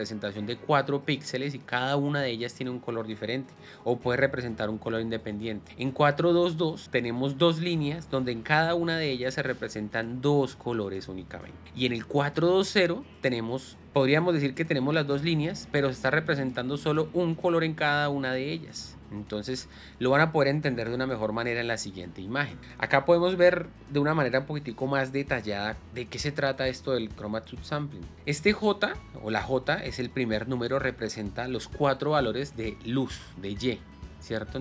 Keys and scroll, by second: 21.2 space, 22.0 Escape.